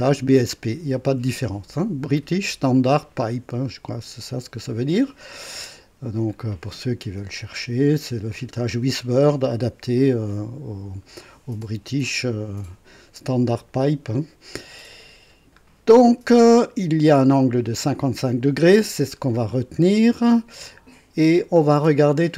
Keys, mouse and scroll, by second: 15.0 scroll down 2, 20.5 scroll down 2, 21.2 scroll down 1.